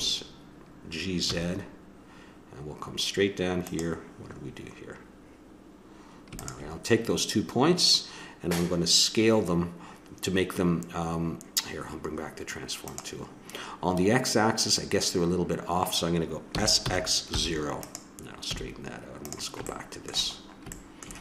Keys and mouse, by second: 6.4-11.3 drag, 12.8-16.5 drag, 16.5 s, 18.4 a, 19.2-21.2 drag.